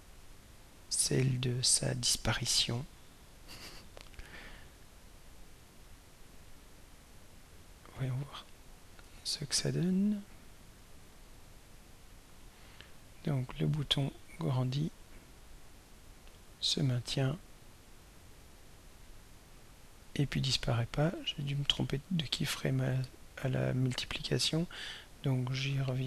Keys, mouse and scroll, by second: 0.1 click, 1.5 right click, 3.1 drag, 6.4 right click, 7.7 drag, 9.1 right click, 11.1 click, 12.4-20.2 drag, 21.1 click, 21.6 right click, 24.6 click, 25.7 click.